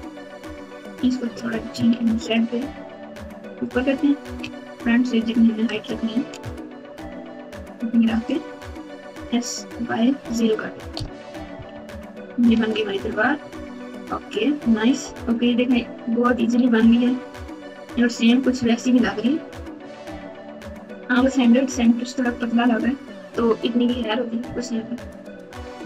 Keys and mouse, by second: 0.1 click, 1.2 g, 4.3 KP_1, 5.8 g, 9.1 s, 11.5 KP_6, 11.7 KP_6, 11.8 KP_6, 12.5 alt+z, 13.1 Tab, 13.7-14.3 KP_Subtract, 15.0 KP_4, 15.1 KP_4, 15.3 KP_4, 15.5-16.2 KP_4, 16.7 KP_Divide, 18.5 KP_Add, 18.9 KP_Add, 19.0 KP_Add, 23.6 Tab, 24.4 KP_2, 24.8 Tab, 25.2 Tab.